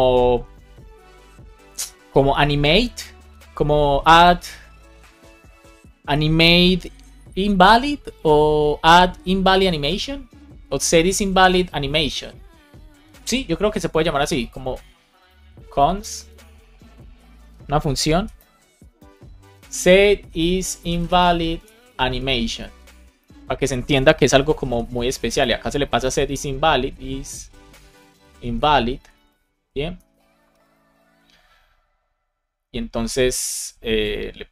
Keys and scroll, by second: 15.0 Return, 15.9 BackSpace, 16.5 BackSpace, 17.1 BackSpace, 18.7-21.6 typing, 23.1 space, 24.2 shift+9, 24.6 shift+[, 24.9 space, 25.9 shift+\, 27.9-30.7 typing, 28.9 Right, 30.9 Return, 34.4 super+x.